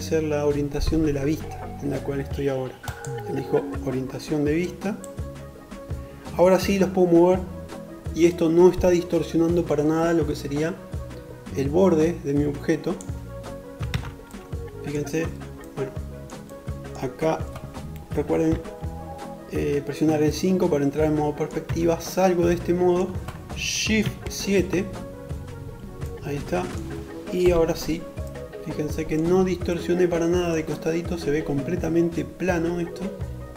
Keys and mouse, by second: 12.6 alt+z, 17.2 KP_5, 20.5 Tab, 23.1 shift+KP_7, 26.2 KP_5.